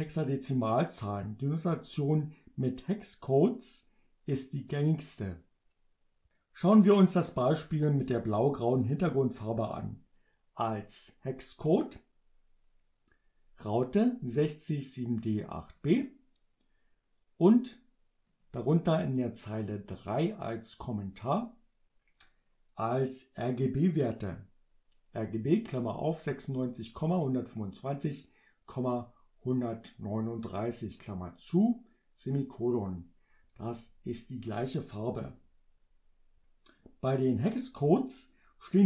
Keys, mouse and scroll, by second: 14.0 click, 14.9 click, 15.8 click, 18.3 click.